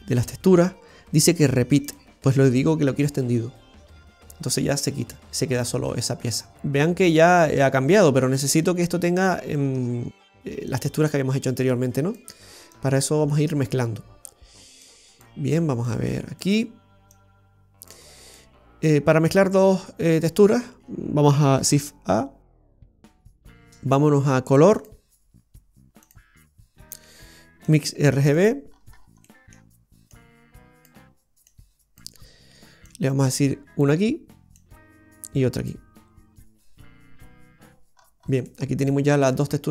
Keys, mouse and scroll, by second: 1.9 click, 4.7 middle click, 4.7-5.7 scroll down 2, 6.5 middle click, 7.7 shift+middle click, 8.0-9.0 scroll down 3, 9.3-10.0 scroll down 11, 10.8 click, 10.8-11.1 scroll down 1, 11.7 click, 12.8 click, 14.9 click, 16.0 click, 17.2 click, 18.5 middle click, 21.9 shift+a, 29.0 scroll up 5, 29.3 middle click, 30.2 click, 31.5 click, 34.6 click, 38.0 scroll up 2, 38.5 middle click, 38.5-39.5 scroll up 3.